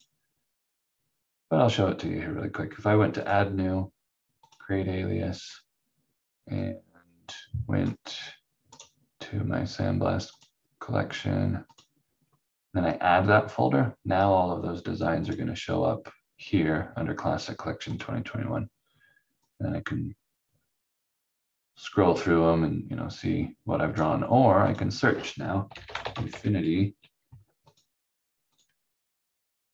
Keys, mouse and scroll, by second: 3.2 click, 8.7 right click, 15.2 click, 25.4-26.7 typing, 27.6 click.